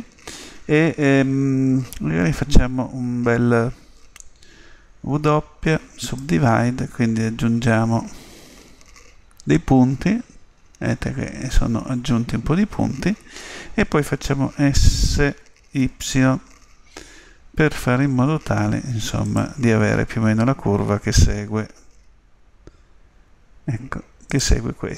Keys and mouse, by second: 5.0 w, 7.9-13.0 middle drag, 15.2 s, 21.9 s.